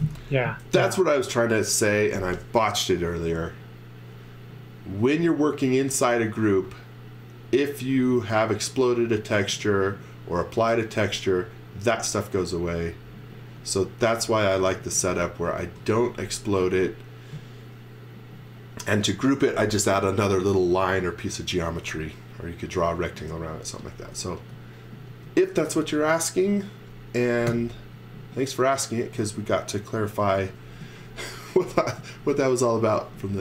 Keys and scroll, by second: 15.6 x, 15.9 v, 17.5 space, 24.1 x, 26.1 space, 27.5 Delete, 29.1 Delete, 30.3-32.8 typing.